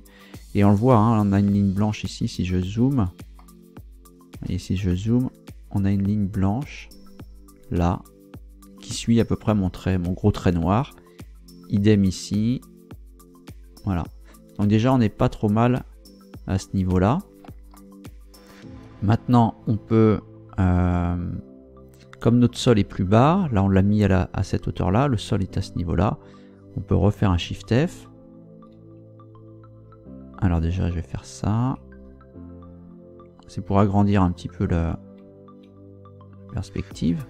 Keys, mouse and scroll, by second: 2.0-2.7 scroll up 4, 3.4-4.6 shift+middle drag, 4.8-5.2 shift+scroll up 1, 16.6 scroll down 2, 17.0 scroll up 2, 17.7-19.0 shift+middle drag, 27.4 shift+f, 28.2 Up, 29.0 Down, 33.1 Up, 34.4 Down, 35.2 Up, 36.5 Up, 37.0 Down.